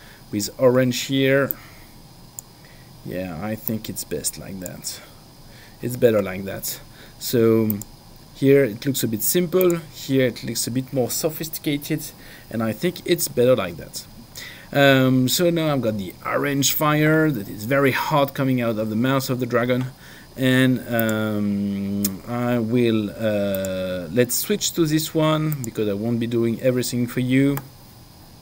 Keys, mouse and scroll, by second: 1.7 click, 3.9 click, 7.7 click, 9.6 click, 21.0 click, 23.5 click, 25.5 click.